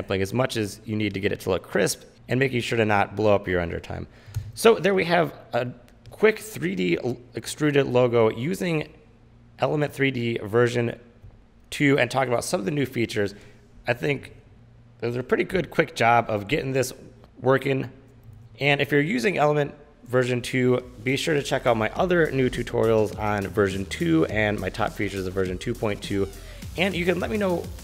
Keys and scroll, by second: 4.8 space, 18.2 super+s.